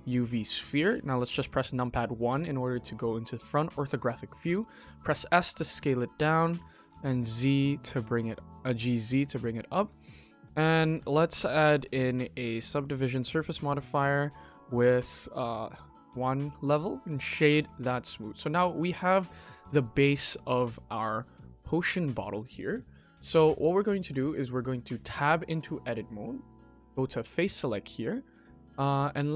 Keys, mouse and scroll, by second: 0.4 KP_1, 0.9-1.3 scroll up 3, 1.3-1.8 shift+middle drag, 4.3 s, 6.7 g, 8.6-9.1 scroll up 3, 9.2-9.7 shift+middle drag, 9.9-10.3 middle drag, 10.3 scroll down 2, 10.6 shift+middle drag, 11.4 click, 11.8-12.6 drag, 13.7 click, 14.2-14.9 scroll up 2, 14.9 click, 15.2 click, 15.6-16.0 scroll up 2, 16.0 right click, 17.1 middle drag, 17.5-18.0 scroll down 3, 18.0 shift+middle drag, 18.4-18.7 scroll up 2, 18.7 KP_1, 19.1-19.5 shift+middle drag, 23.2 middle click, 23.8 shift+middle drag, 24.1 Tab, 24.6 middle click, 25.2 shift+middle click, 25.5 click, 26.5 click, 27.8 middle click, 28.0 middle click, 28.5-29.1 scroll up 2.